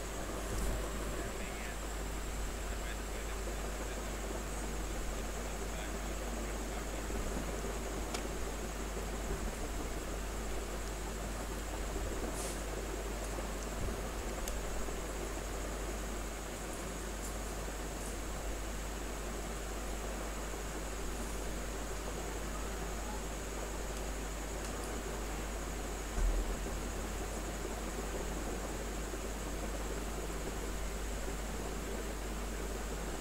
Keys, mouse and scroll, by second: 3.1 space, 3.3 click, 3.5 space, 4.3 click, 4.4 space, 6.9 click, 7.7 ctrl+d, 9.2 click, 10.5 ctrl+space, 10.7 ctrl+click, 11.0 ctrl+space, 11.7 r, 11.9-14.1 drag, 14.1 b, 14.4 space, 14.6-18.6 ctrl+drag, 18.6 click, 19.8 space, 20.2 click, 20.3 space, 21.2-23.0 drag, 23.0 space, 23.2 click, 23.6 space, 23.9 x, 24.2 click, 24.9 x, 25.3 click, 26.4-28.6 drag, 28.8 space, 29.2 click, 29.4 space, 29.9-33.2 drag.